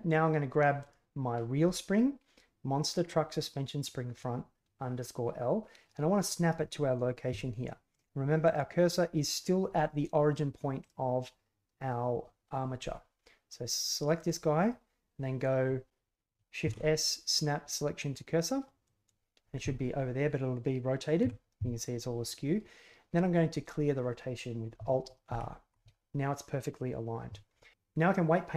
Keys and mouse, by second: 0.8 right click, 7.9 right click, 10.8 right click, 14.1 right click, 16.6 shift+s, 21.2 KP_1, 25.2 alt+r.